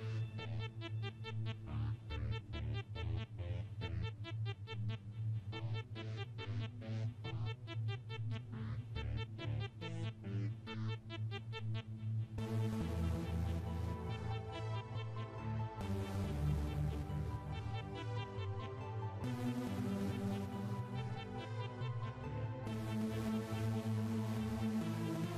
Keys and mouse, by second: 0.1 click, 1.6 click, 2.7 click, 4.0 click, 5.7 click, 6.9 click, 8.1 click, 9.4 click, 12.2 click, 14.7 click, 15.5 click, 16.7 click, 23.2 click.